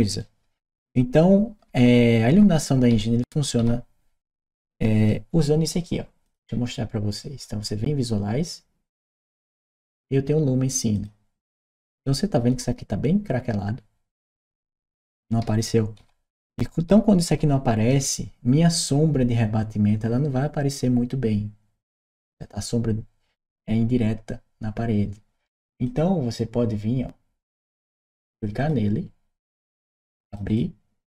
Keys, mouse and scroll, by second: 0.0-4.8 shift+right drag, 1.5 d, 3.4 s, 4.5 w, 6.0 click, 10.8 click, 12.0-17.7 right drag, 25.6 click, 27.3 click, 28.4 click, 30.1 click, 30.3 click.